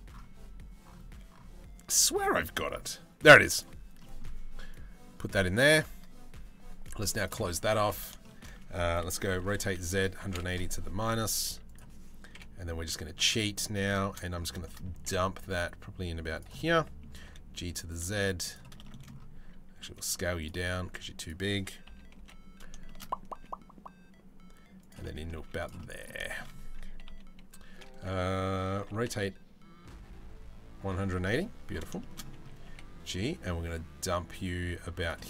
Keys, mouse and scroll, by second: 3.7 middle click, 6.7 click, 7.8 shift+middle click, 8.9 r, 10.9 s, 11.9 KP_7, 12.4 z, 14.2 shift+middle click, 14.5 g, 16.2 middle click, 16.7 g, 17.7 z, 18.4 shift+middle click, 18.9 s, 19.7 z, 20.4 s, 21.5 KP_3, 21.8 KP_1, 22.4 shift+middle drag, 22.9 g, 24.6 middle click, 25.0 z, 25.4 middle drag, 25.9-26.6 shift+middle drag, 26.6 KP_3, 28.4 r, 31.6 shift+middle click, 32.2 g, 34.8 middle click.